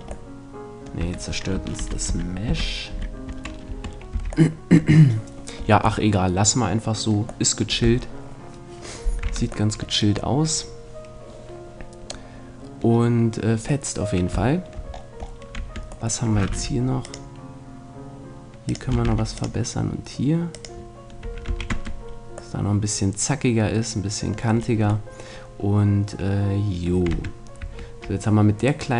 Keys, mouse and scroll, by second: 1.0 Tab, 1.8 ctrl+z, 2.1 ctrl+z, 2.5 ctrl+z, 2.9 ctrl+z, 3.7 Tab, 3.9-6.0 middle drag, 4.1 a, 15.6 Tab, 16.5 ctrl+r, 18.7-22.2 drag, 19.1 ctrl+r, 21.5 a, 21.7 Tab, 22.2-23.5 middle drag, 27.1 Tab, 27.7 Tab, 28.7-28.9 right drag.